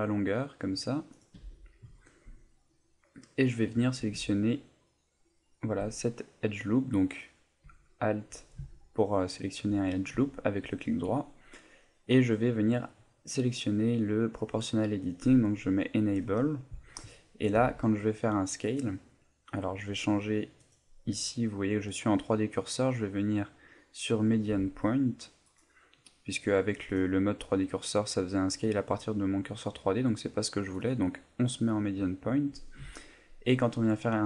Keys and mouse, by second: 1.2 click, 1.3 a, 3.3 middle click, 5.3 alt+shift+right click, 6.0 middle click, 6.8 middle click, 7.9 alt+right click, 8.7 alt+right click, 9.7 middle click, 10.3 alt+right click, 11.2 middle click, 13.2 click, 17.5 s, 18.8 right click, 20.6 click, 24.5 s, 25.6 right click, 26.9 click, 30.7 click, 32.8 s.